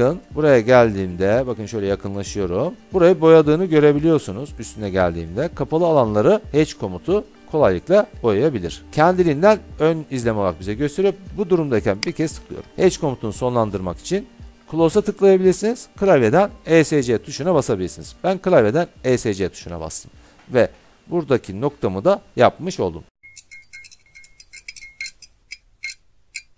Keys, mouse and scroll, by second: 1.6 scroll, 2.2 scroll, 12.3 click, 17.7 Escape, 20.3-21.1 scroll.